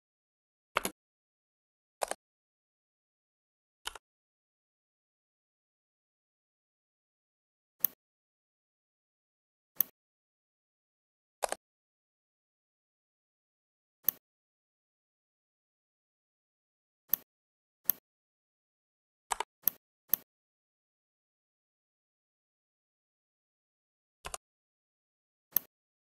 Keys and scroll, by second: 0.6 space.